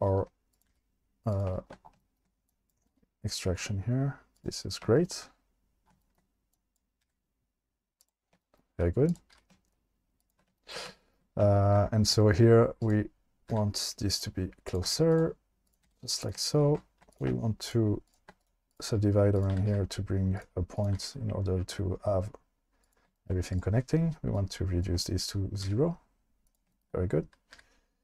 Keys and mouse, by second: 0.7 g, 1.3 click, 2.9 g, 4.3 click, 7.0 g, 8.0 click, 9.1 click, 9.3 g, 11.0 shift+middle click, 12.8 click, 13.5 g, 14.1 click, 14.9 g, 15.9 click, 15.9 g, 17.1 click, 17.6 shift+click, 18.1 shift+click, 18.5 right click, 19.5 g, 19.7 g, 20.9 g, 23.5 click, 24.4 click, 24.9 click, 25.6 g, 26.5 click, 26.7 shift+middle click, 27.5 g.